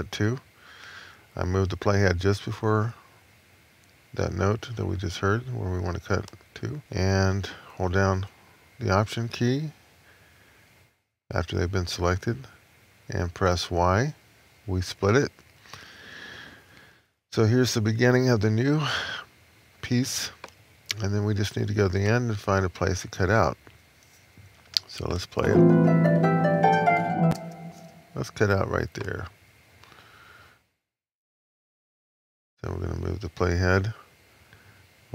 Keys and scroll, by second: 13.6 alt+¥, 14.9 Left, 15.6 Left, 16.3 Left, 16.9 Left.